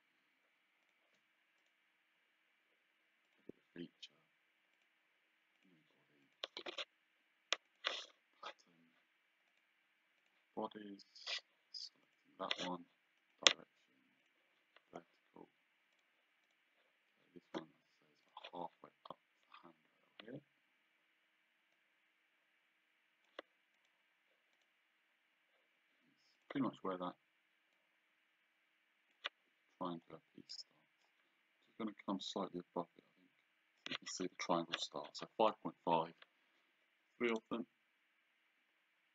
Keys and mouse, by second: 0.9 click, 1.6 right click, 3.3 click, 4.8 click, 7.7 click, 9.6 click, 12.1 click, 13.3 click, 16.1 click, 18.3 click, 21.8 click, 23.8 click, 26.4 click, 27.8 click, 30.6 click, 32.4 click, 37.4 click.